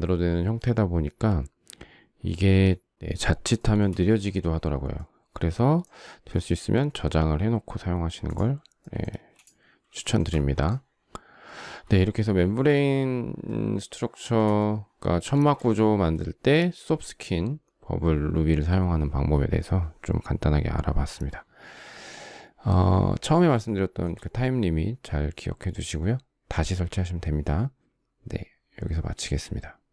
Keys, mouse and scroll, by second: 3.2 shift+middle click, 8.7 space, 9.6 shift+middle click, 12.1 shift+middle click, 12.2 shift+middle click, 13.5 shift+middle click, 14.8 shift+middle click, 15.1 shift+scroll.